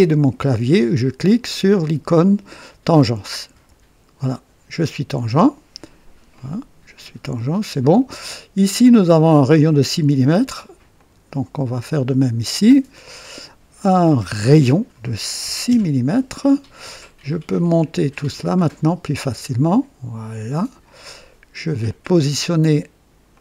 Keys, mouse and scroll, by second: 3.5 t, 6.3-8.2 drag, 10.9 click, 12.9 click, 15.4 KP_6, 15.7 KP_Enter, 18.1-21.0 drag, 21.1-21.8 right drag, 23.3-23.4 drag.